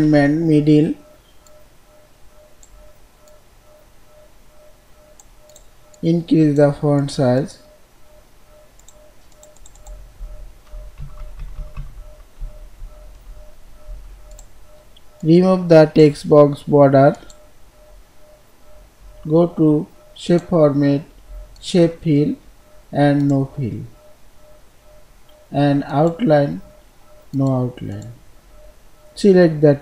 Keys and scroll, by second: 10.8 ctrl+shift+., 13.6 ctrl+b.